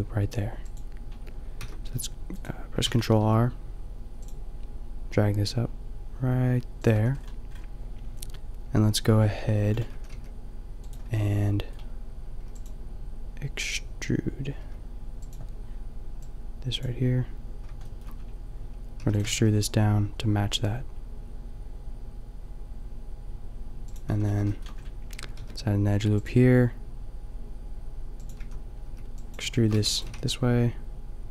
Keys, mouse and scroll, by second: 1.6 ctrl+r, 6.9 a, 8.8 middle click, 10.1 g, 11.1 a, 16.8 b, 18.9 shift+e, 19.2 g, 24.1 a, 25.3 ctrl+r, 28.3 a, 28.9 b, 29.5 click, 29.7-31.3 drag, 29.7 e, 30.0 g.